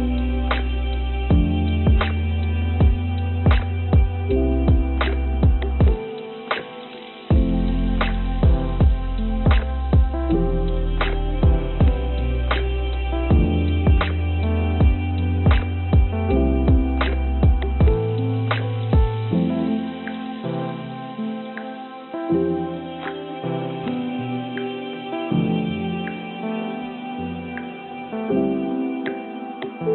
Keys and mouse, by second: 0.1 click, 0.4-2.3 drag, 2.7 a, 3.8 shift+d, 7.8-10.4 drag, 11.6 a, 12.6 g, 15.9 click, 16.0 click, 17.0 click, 17.4 click, 19.0 a, 19.5 click, 20.1 ctrl+z, 20.3 ctrl+z, 20.5 ctrl+z, 20.7 ctrl+z, 20.8 ctrl+z, 21.0 ctrl+z, 21.4 ctrl+z, 22.1 click, 24.0 g, 27.1 click, 28.4 click, 29.2 click.